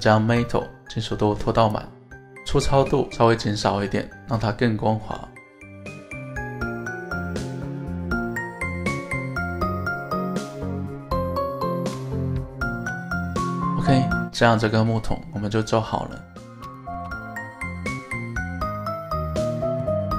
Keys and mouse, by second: 1.1 click, 3.7-6.0 drag, 6.6-7.2 middle drag, 7.8-9.0 middle drag, 10.5-11.8 middle drag, 12.8 KP_1, 14.1-16.4 middle drag, 16.8 shift+middle drag, 17.2-20.1 middle drag.